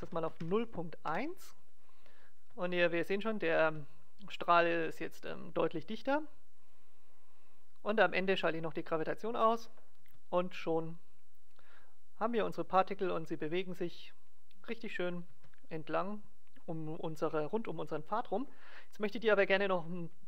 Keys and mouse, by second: 2.3 alt+a, 3.6 alt+a, 6.6-10.2 drag, 10.0 alt+a, 15.3 alt+a.